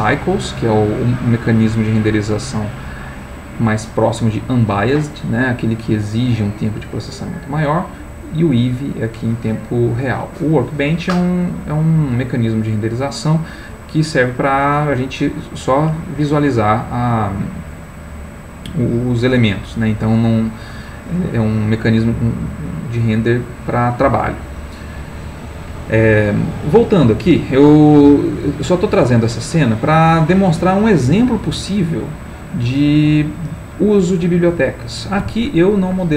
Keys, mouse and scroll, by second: 15.1 click, 23.2 click, 24.1 click, 27.2-34.9 middle drag.